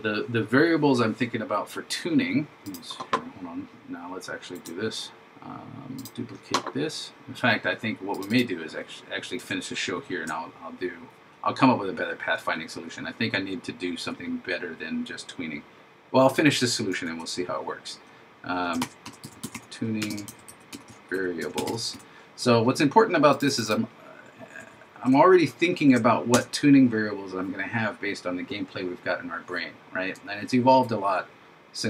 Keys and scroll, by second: 9.9 shift+Up, 20.3 shift+v, 25.2 shift+Up.